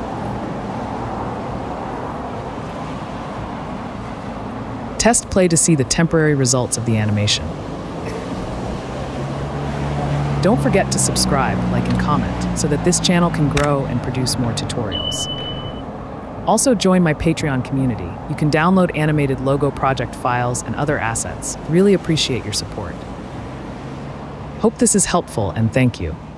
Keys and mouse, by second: 1.6 click, 2.2 click, 3.6 click, 9.3-13.4 typing, 11.7 click, 14.1 click, 16.8 click, 18.3 click, 20.6-21.2 drag.